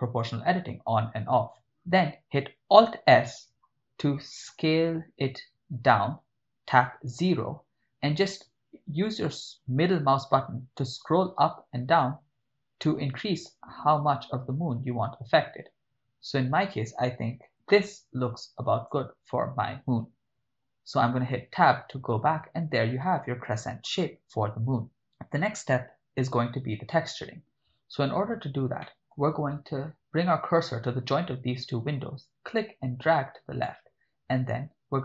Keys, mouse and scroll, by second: 0.0 o, 3.2 alt+s, 6.9 0, 8.2-10.3 scroll down 6, 10.6-11.2 scroll up 4, 11.2-12.6 scroll down 6, 12.6-14.1 scroll up 2, 14.3-14.8 scroll down 1, 14.8 scroll up 1, 15.4-15.8 scroll down 1, 17.5-18.2 scroll up 1, 18.8 click, 21.0 Tab, 28.9 shift+middle click, 32.3-33.7 drag.